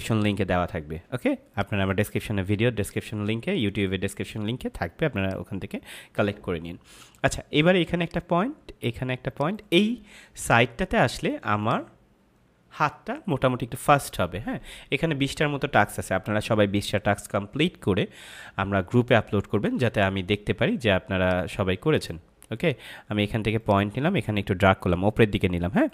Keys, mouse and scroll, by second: 1.5 click, 7.9 click, 21.2 click.